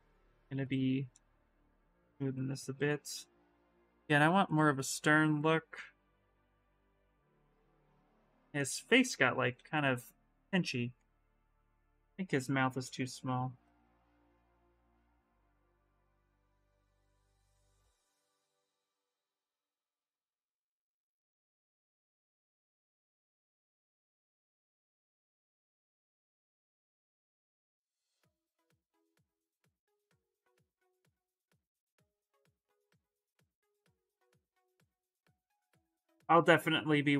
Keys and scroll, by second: 8.5 ctrl+z, 9.3 ctrl+z, 11.9 s, 19.1 s, 20.7-23.8 typing, 33.6 s.